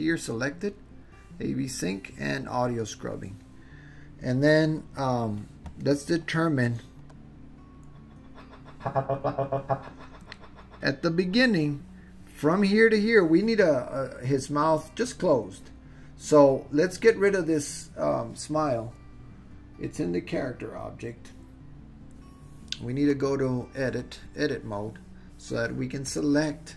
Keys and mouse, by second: 7.2-11.5 drag, 23.3-24.2 drag, 26.1 click.